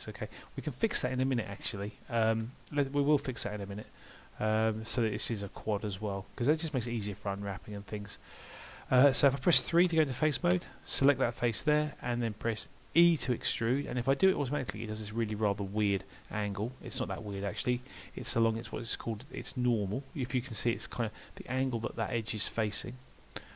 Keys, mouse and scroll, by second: 1.5 middle click, 8.6 middle click, 9.6 3, 10.6 click, 11.4 scroll down 1, 11.7 middle click, 13.0 e.